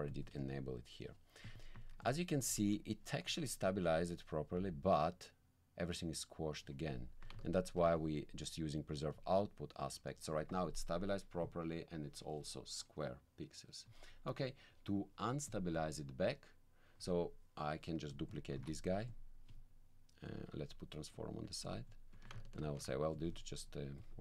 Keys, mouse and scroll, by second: 1.4 ctrl+click, 2.0 ctrl+alt+click, 2.0 ctrl+alt+middle click, 2.5 ctrl+alt+click, 2.6 ctrl+alt+1, 3.8-6.8 drag, 7.4 ctrl+click, 9.1 click, 11.4 click, 14.4 middle click, 15.5 click, 18.1 click, 18.6 alt+c, 19.1 alt+click, 20.3 click, 21.1 click, 22.1 click, 22.1 1, 22.6 ctrl+click, 23.1 ctrl+click, 24.0 click.